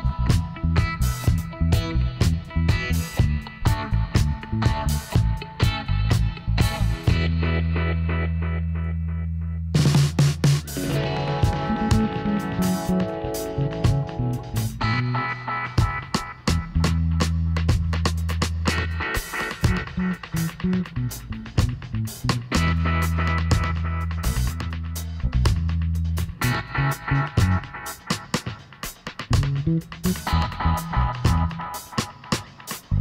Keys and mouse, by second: 0.7 b, 2.2-4.0 drag, 4.0-5.1 middle drag, 5.1-6.5 drag, 5.1 b, 6.5 middle click, 7.4 e, 9.9-11.8 drag, 12.8-15.0 middle drag, 13.9 e, 15.9 s, 18.4-20.1 drag, 21.4 s, 23.1-24.8 drag, 25.7-27.4 right drag, 26.9 b, 28.5-30.2 drag, 30.3-33.0 middle drag.